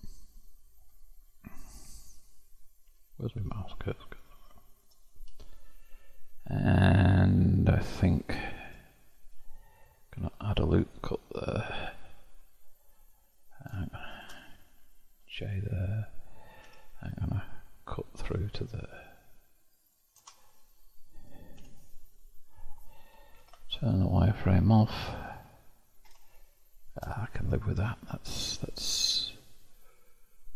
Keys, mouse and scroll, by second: 4.0 click, 5.2 0, 7.2-10.1 shift+middle drag, 10.1 ctrl+r, 13.0 click, 14.0 shift+click, 15.2 j, 16.6 k, 21.6 Tab, 23.3 alt+v, 24.6-25.0 scroll down 1, 25.0-27.1 middle drag, 27.1-27.5 scroll down 1, 27.5-30.5 middle drag.